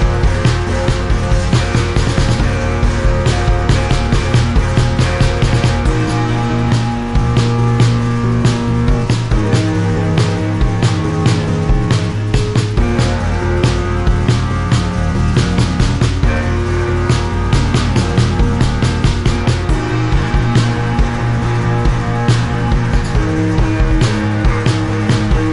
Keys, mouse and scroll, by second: 0.3 right click, 1.4 click, 1.9 click, 1.9 right click, 4.2 click, 5.3 click, 6.2 right click, 6.2 click, 6.8 click, 7.3 click, 13.3 click, 13.9 click, 14.4 click, 17.3 click, 20.5 shift+click, 22.1 Delete, 22.7 click, 23.6 click, 24.2 click.